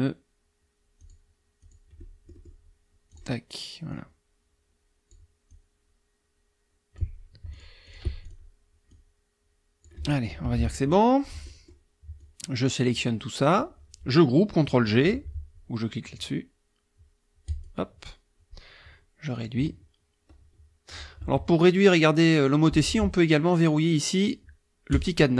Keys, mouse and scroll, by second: 1.0 click, 1.6 click, 3.1 click, 3.9-5.3 drag, 5.5-7.2 drag, 7.5 shift+click, 7.8 shift+click, 8.2 shift+click, 8.9 click, 10.4 KP_Subtract, 11.4 click, 12.2-13.7 drag, 17.5 click, 19.4-21.1 ctrl+drag, 21.2 ctrl+z, 24.9 click.